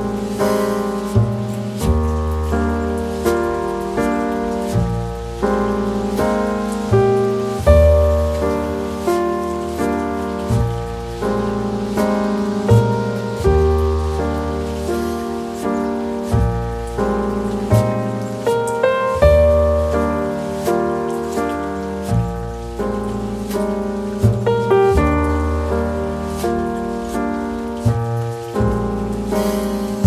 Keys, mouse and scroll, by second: 1.6 middle click, 4.2 s.